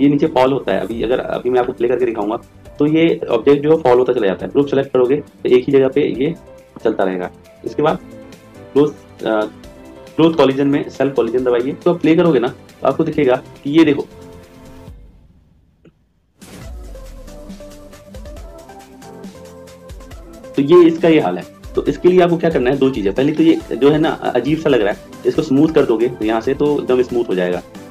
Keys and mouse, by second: 8.3 click, 10.8 click, 12.0 click, 23.3 click, 25.4 click.